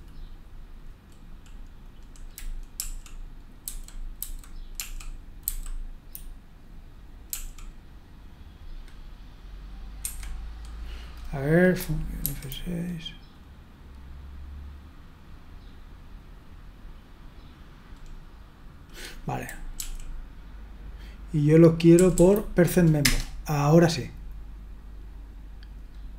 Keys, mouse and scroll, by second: 2.7 Right, 3.6 Left, 4.1 Left, 4.8 Right, 5.4 Left, 7.3 l, 10.0 Escape, 12.2 F6, 19.8 Up, 22.0 Down, 22.1 Down, 23.0 Return.